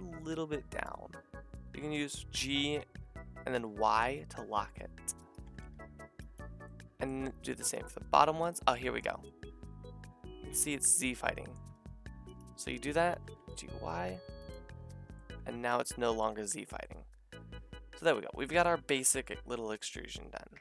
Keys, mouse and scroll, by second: 1.8 g, 5.4 g, 7.5 a, 11.8 alt+shift+click, 13.1 g, 14.9 a, 16.1-20.6 middle drag.